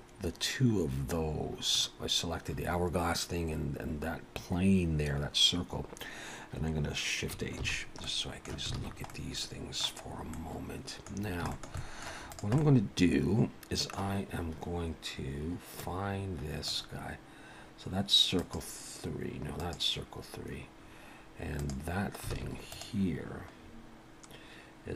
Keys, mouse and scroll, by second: 7.6 shift+h, 8.1 middle click, 8.8 alt+a, 9.1 middle click, 10.1-10.4 scroll up 3, 10.3 middle click, 11.2-11.5 scroll down 3, 11.5 shift+middle click, 11.8 middle click, 12.3 click, 12.6 middle click, 15.7 click, 18.4 click, 21.6 click, 22.3 alt+a, 22.7 click, 23.6-24.9 scroll down 4.